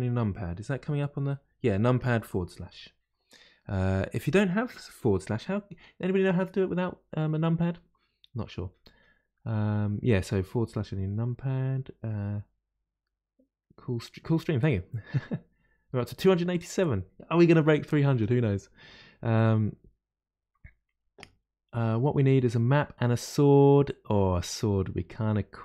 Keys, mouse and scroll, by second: 0.7 KP_Divide, 2.6 KP_Divide, 2.9 KP_Divide, 3.6-6.6 middle drag.